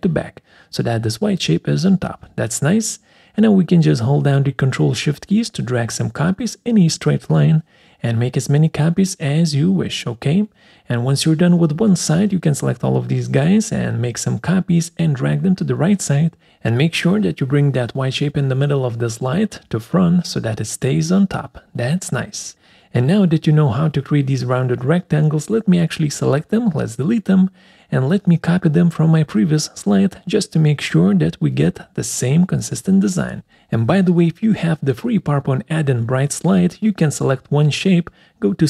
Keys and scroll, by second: 26.6 Delete.